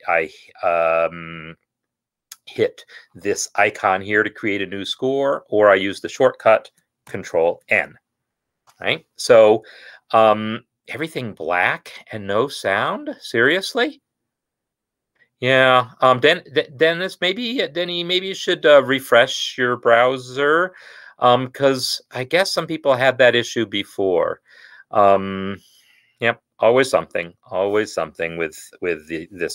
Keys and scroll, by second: 7.3 ctrl+n.